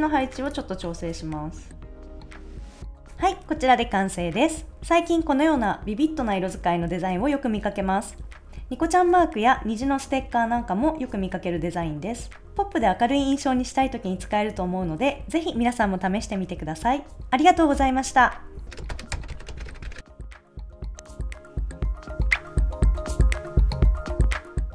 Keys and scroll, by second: 1.3 shift+Down, 1.7 Right, 1.8 Up, 2.1 Down, 2.2 super+s, 2.3 Up, 2.5 Down, 2.6 super+s.